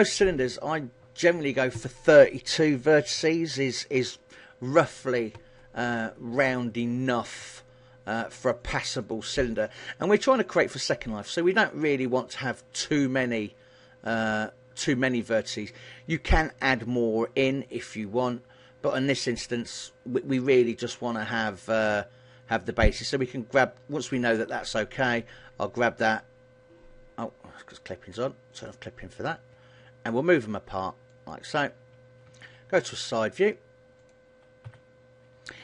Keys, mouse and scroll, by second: 10.2 click, 10.6 click, 10.8 click, 11.2 click, 11.6 click, 12.2 click, 12.5 click, 13.0 click, 23.1 g, 25.5 g, 28.7 click, 29.6 g, 31.4 click, 32.4 KP_3, 32.7 KP_1, 34.2 click, 34.8 KP_3.